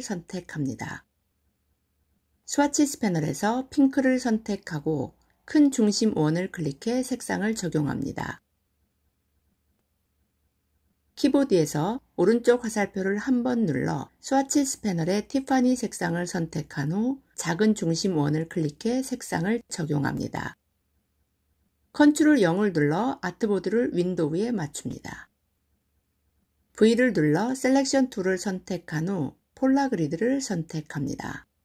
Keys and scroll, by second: 11.5 Right, 16.5 Right, 21.8 ctrl+0.